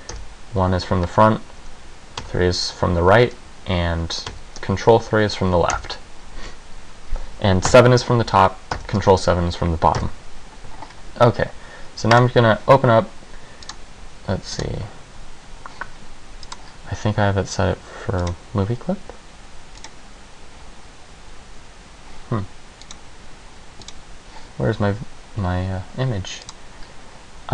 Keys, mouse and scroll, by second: 0.3 KP_1, 2.3 KP_3, 4.4 ctrl+KP_3, 5.9 KP_1, 7.8 KP_7, 8.8 ctrl+KP_7, 10.1 KP_1, 16.7 click, 18.5 click, 19.9 click, 26.7 click.